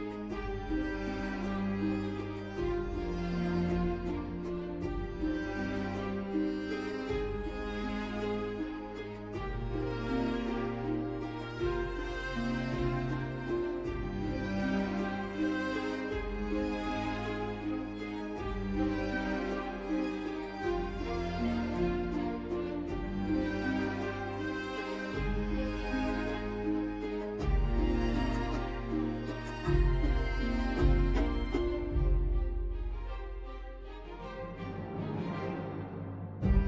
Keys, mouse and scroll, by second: 22.5 n.